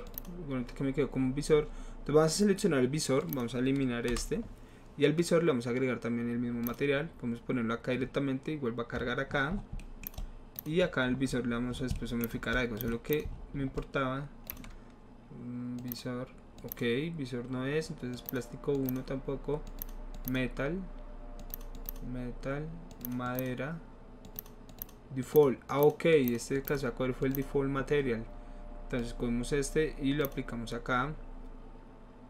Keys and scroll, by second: 4.1 Delete.